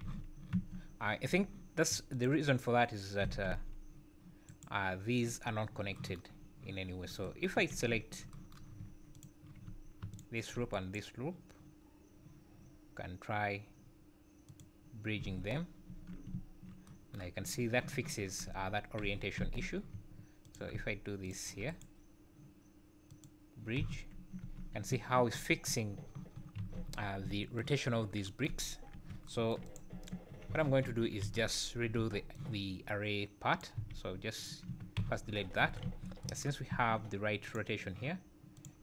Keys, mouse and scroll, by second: 0.0 z, 0.6 Tab, 1.0 scroll up 5, 1.3 Tab, 2.1 alt+click, 3.3 g, 6.4 scroll down 2, 6.9 scroll up 2, 7.6 2, 7.9 `, 9.1 alt+click, 10.1 alt+shift+click, 10.7 right click, 15.2 z, 15.9 Tab, 16.3 `, 18.5 Tab, 19.0 z, 19.4 `, 20.4 alt+click, 21.2 alt+shift+click, 21.7 right click, 23.8 z, 24.4 Tab, 24.9 `, 26.6 alt+a, 27.0 scroll down 3, 27.2 `, 27.9 scroll down 2, 28.6-28.9 scroll up 3, 28.9 KP_1, 29.6 click, 29.9 Tab, 30.3 scroll down 5, 30.5 z, 30.8 1, 31.2 alt+a, 31.9 b, 33.7 x, 34.7 Tab, 35.0 z, 35.3 scroll up 5, 35.6 alt+a, 35.8 `, 36.7 `, 37.4 click, 38.5 click.